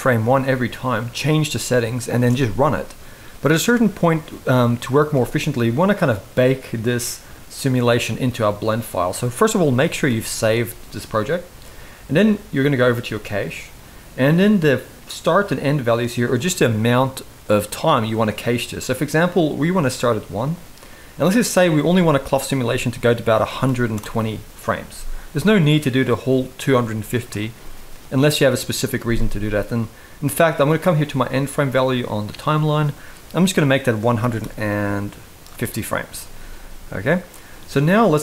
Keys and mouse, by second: 1.9 space, 4.8 space, 9.6 ctrl+s, 9.8 ctrl+s, 12.5 click, 21.1-23.7 drag, 32.0-35.2 drag, 36.6 middle click.